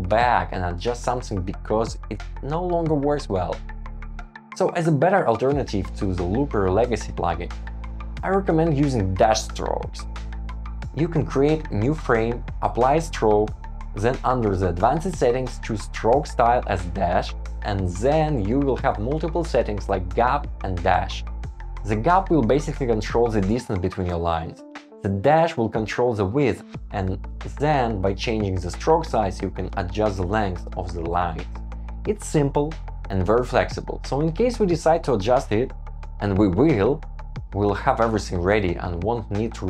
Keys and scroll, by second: 5.0 shift+Up, 6.0 shift+Up, 7.5 Down, 10.1 shift+Down, 10.7 shift+Down, 11.2 shift+Up, 13.5 shift+Down, 15.7 shift+Down, 16.4 Tab, 16.6 shift+Up, 17.5 Up, 19.3 Escape, 26.8 shift+Up, 31.5 shift+Up, 31.9 Escape, 32.4 shift+Up, 32.7 shift+Up, 33.1 shift+Up, 33.2 Down, 33.2 shift+Up, 34.1 shift+Down, 34.4 shift+Up, 35.3 Return, 35.9 shift+Up, 36.4 shift+Down, 36.5 shift+Up, 37.0 shift+Up, 37.2 shift+Down, 37.3 shift+Up, 37.7 shift+Up, 38.0 shift+Down, 38.2 shift+Down, 38.3 Escape, 38.5 super+z, 38.7 Escape, 38.8 super+s.